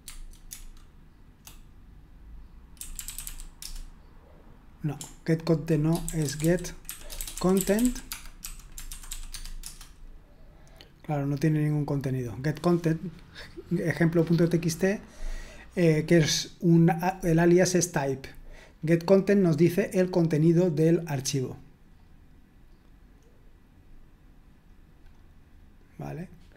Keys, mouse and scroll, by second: 0.0 Tab, 0.5 BackSpace, 1.1 BackSpace, 1.2 BackSpace, 2.8-4.1 typing, 6.2-9.6 typing, 17.8-19.0 drag, 18.7-19.6 scroll up 1, 21.9-22.7 scroll up 1, 23.8-24.5 scroll up 1, 24.5-25.9 scroll down 1, 25.9-26.5 scroll down 1.